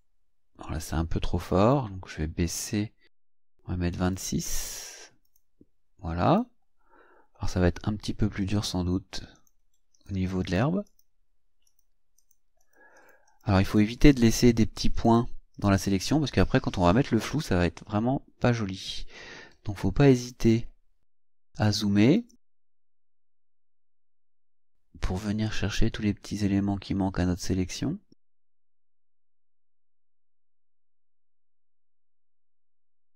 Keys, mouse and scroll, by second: 1.6 click, 2.6 click, 4.0 click, 5.3 click, 6.3 click, 8.4 click, 9.3 click, 9.9 click, 10.4 click, 10.9 click, 11.7 click, 12.2 click, 12.6 click, 13.7 click, 14.1 click, 15.0 click, 15.5 click, 19.1-19.6 ctrl+scroll up 4, 19.6-20.2 ctrl+scroll down 5, 22.2 click, 23.7-28.4 drag, 28.7 scroll down 2, 30.1-30.7 ctrl+scroll up 4, 31.0-31.4 ctrl+scroll down 3, 31.7-32.1 scroll up 2, 32.8-33.1 drag.